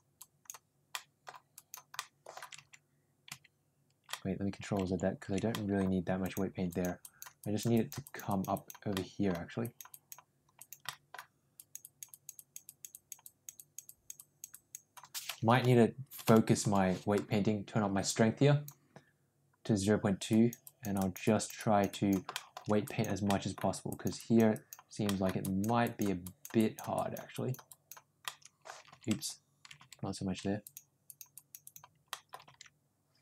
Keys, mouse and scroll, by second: 0.1 click, 0.8 middle click, 1.5 click, 1.9 middle click, 2.8 ctrl+z, 4.0 middle click, 5.4 middle click, 6.2 click, 6.6 click, 6.9 click, 7.3 click, 7.7 click, 8.0 click, 8.2 click, 8.4 click, 8.8 middle click, 9.5 click, 9.9 click, 10.5 click, 10.8 middle click, 11.5 click, 11.7 click, 12.0 click, 12.3 click, 12.6 click, 12.8 click, 13.1 click, 13.5 click, 13.8 click, 14.1 click, 14.4 click, 15.5 [, 16.0 [, 16.1 [, 16.5 [, 18.1 click, 20.2 click, 20.5 click, 20.8 click, 21.2 click, 21.5 click, 21.8 click, 22.3 shift+middle click, 22.8 click, 23.2 middle click, 23.8 click, 24.1 click, 24.5 click, 25.0 middle click, 25.3 click, 25.8 click, 26.2 click, 26.5 click, 26.9 click, 27.2 click, 27.6 click, 28.2 middle click, 29.2 ctrl+z, 30.5 click, 31.0 click, 31.3 click, 31.6 click, 32.0 middle click, 32.7 ctrl+z.